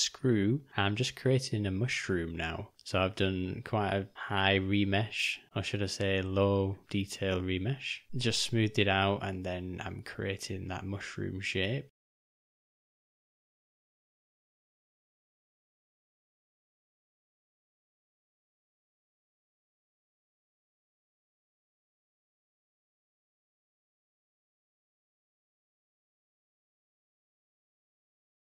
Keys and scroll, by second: 2.7 j, 7.4 u, 8.0 ], 8.1 ], 12.8 m, 13.7 [, 13.8 [, 21.1 shift+/, 25.6 o, 27.3 d, 28.0 d.